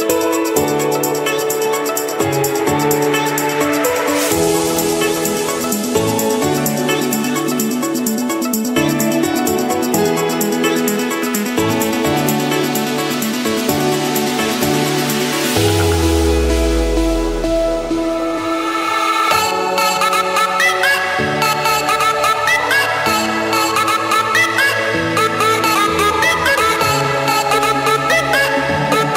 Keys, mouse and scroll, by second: 1.7 7, 2.4 Return, 4.9 click, 5.3 click, 6.7 click, 7.0 shift+click, 8.7 shift+click, 9.4 ctrl+1, 13.2-14.3 drag, 14.6-15.2 typing, 16.0 Return, 18.4 click, 19.9 Escape, 20.8 click, 22.0 click, 22.4-22.9 scroll, 23.5 click, 24.5 click, 26.0-27.3 drag, 28.7 click.